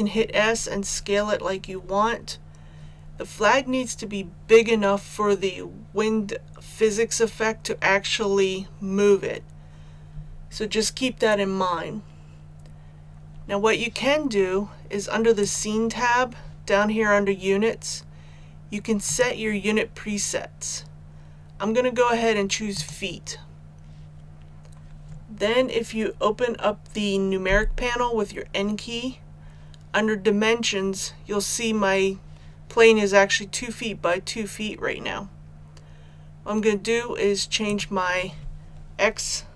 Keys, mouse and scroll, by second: 15.3 click, 27.4 n, 37.6 click.